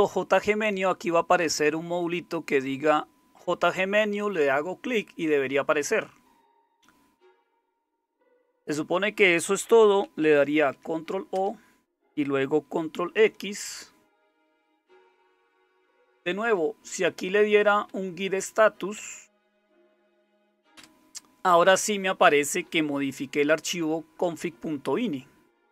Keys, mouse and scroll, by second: 10.6 ctrl+o, 11.3 Return, 13.1 ctrl+x, 17.1 Up, 17.8 Up, 18.3 Up, 18.9 Up, 19.3 Up, 20.7 Return.